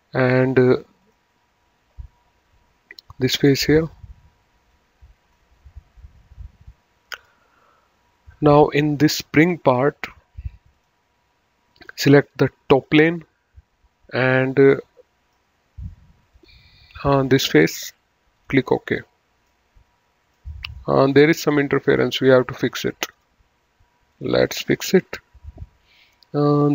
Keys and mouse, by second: 1.0 click, 3.1 click, 4.7 click, 7.0 click, 10.7 click, 12.4 click, 14.7 middle click, 16.3 click, 18.2 click, 19.4 middle click, 21.1 middle click, 23.1 click.